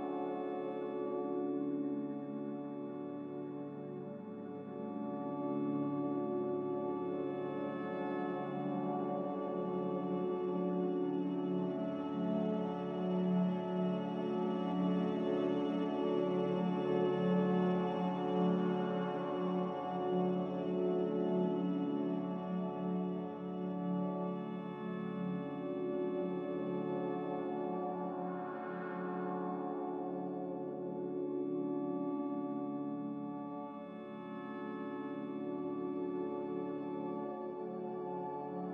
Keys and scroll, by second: 24.3 z, 31.1 Delete, 35.9 Delete.